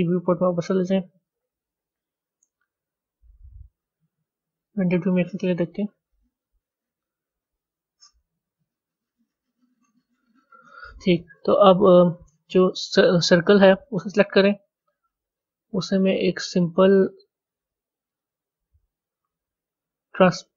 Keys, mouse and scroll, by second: 6.4 z, 8.9 a, 13.6 click, 15.3-20.0 drag.